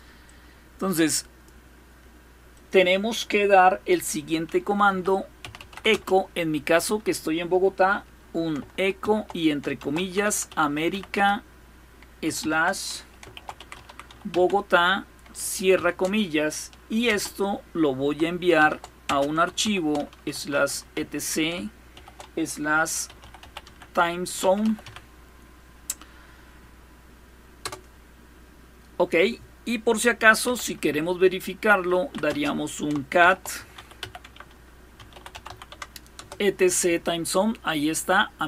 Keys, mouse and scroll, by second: 1.5 click, 2.1 click, 4.2-5.8 typing, 8.6-15.4 typing, 16.7 typing, 18.2-20.6 typing, 21.6-25.0 typing, 27.2 Return, 30.1 typing, 31.3-35.8 typing.